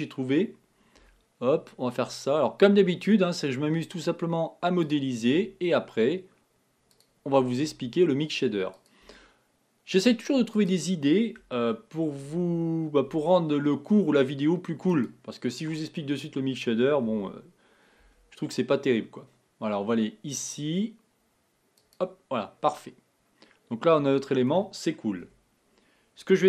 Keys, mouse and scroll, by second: 1.0 e, 5.3 e, 7.7 e, 9.2 e, 11.6 shift+middle click, 12.4 scroll up 1, 13.1 e, 16.0 scroll down 1, 17.1 e, 22.3-23.4 scroll down 4, 25.2 KP_1.